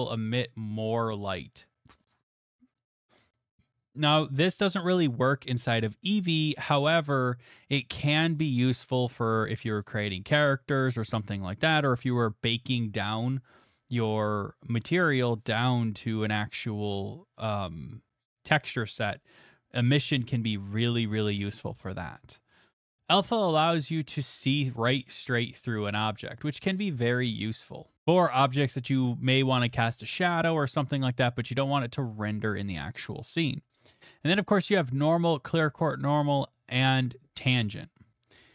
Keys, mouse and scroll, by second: 2.7 middle click, 7.5 middle click, 12.6 middle click, 23.0 click, 23.0 middle click, 26.4 middle click, 27.9 click, 28.7-31.2 right drag, 33.6-38.5 middle drag.